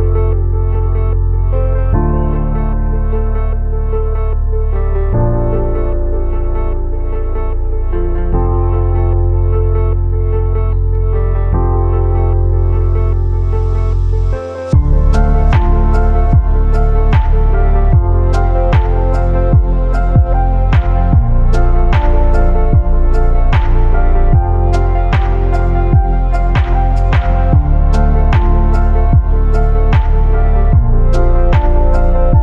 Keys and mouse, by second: 2.3 click, 6.3-12.8 drag, 15.0 shift+middle click, 15.9-16.6 shift+middle drag, 19.2-19.8 shift+middle drag, 20.2 click, 22.6 click, 23.6 click, 24.5 click, 27.0-30.6 shift+middle drag, 32.1-32.4 shift+middle drag.